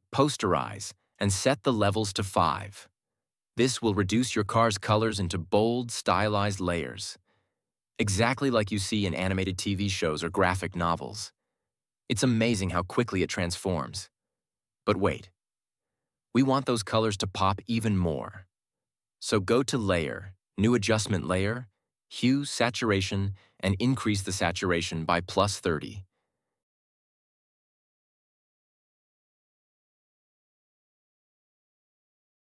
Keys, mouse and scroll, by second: 1.2 click, 4.1 BackSpace, 4.3 5, 6.5 typing, 6.9 click, 21.1-26.8 drag, 27.4-28.3 typing, 30.2 Return.